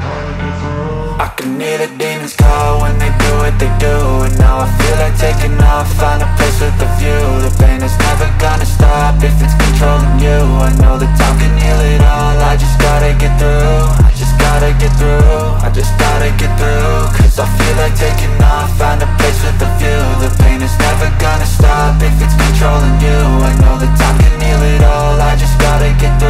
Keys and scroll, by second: 13.5 space.